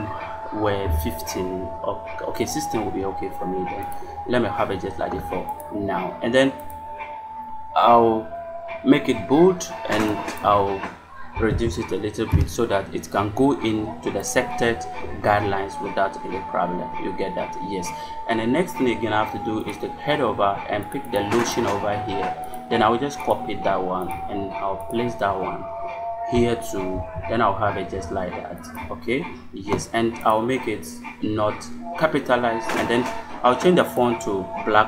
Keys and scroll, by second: 11.0-11.9 typing, 12.2 Return, 23.1 space, 26.8 ctrl+v.